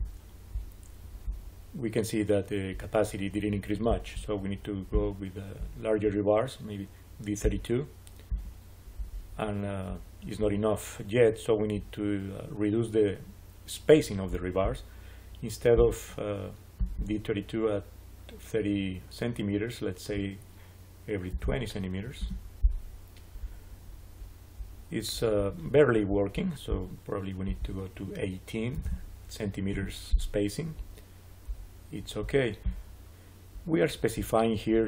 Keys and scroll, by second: 21.0-21.8 typing, 22.1 Return, 28.4-29.2 typing, 29.6 Return.